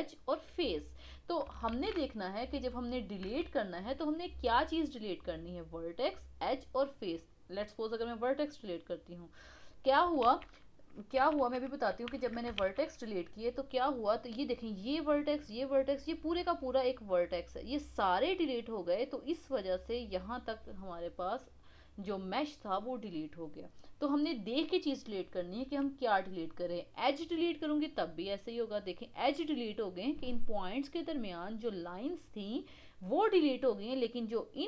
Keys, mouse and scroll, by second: 1.7 shift+a, 3.2 x, 10.3 shift+z, 11.1 ctrl+z, 11.4 ctrl+z, 12.6 shift+z, 15.9 click, 16.1 click.